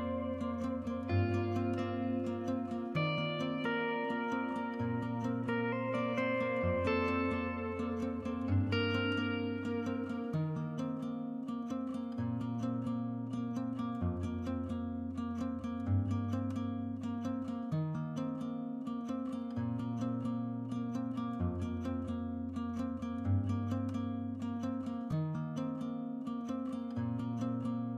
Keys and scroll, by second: 7.4-15.0 Escape, 7.6-8.6 typing, 26.6-27.0 typing.